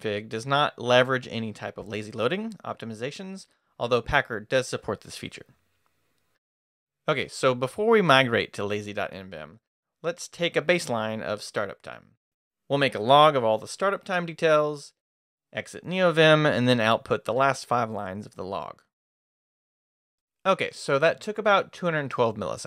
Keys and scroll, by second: 6.4 shift+Escape, 6.5 shift+;, 6.9 shift+q.